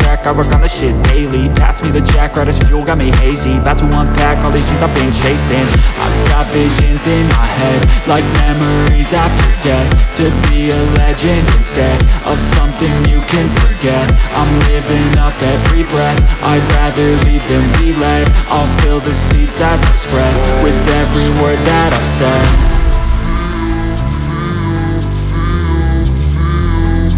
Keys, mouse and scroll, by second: 2.6 click, 9.3 click, 23.6 click.